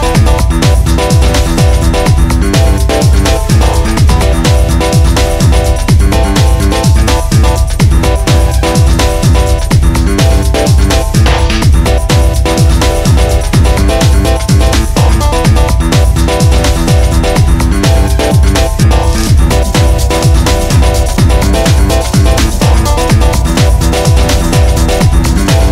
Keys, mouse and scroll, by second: 0.1 KP_0, 0.5 ctrl+s, 0.6 scroll up 2, 0.7 click, 1.1 scroll down 3, 1.2 scroll up 3, 1.7 click, 2.1 ctrl+s, 2.3 ctrl+s, 2.8 click, 5.2-6.3 scroll up 1, 6.3 scroll up 2, 6.4 scroll down 3, 6.6 scroll up 1, 6.8 scroll down 1, 7.0-7.3 scroll up 1, 7.3 click, 7.9 click, 8.3-8.6 scroll down 2, 8.6 click, 9.1 click, 9.3-9.8 scroll down 1, 9.8 click, 10.2 click, 10.7 click, 11.2-11.5 scroll up 1, 11.5 click, 11.9 shift+click, 12.9 shift+click, 13.4 shift+click, 14.3 click, 14.6 scroll up 2, 14.8 g, 16.0 click, 16.5 g, 20.2 click, 20.4 scroll down 2, 20.5 scroll up 2, 20.6 click, 21.2 click, 21.6 scroll down 1, 21.7 click, 22.0 scroll up 3, 22.1 click, 22.7 click, 22.8 scroll down 3, 22.9 scroll up 1, 23.1 ctrl+s, 23.5-24.7 scroll up 3, 24.9 scroll down 2, 25.1 scroll up 2, 25.3-25.7 scroll down 2.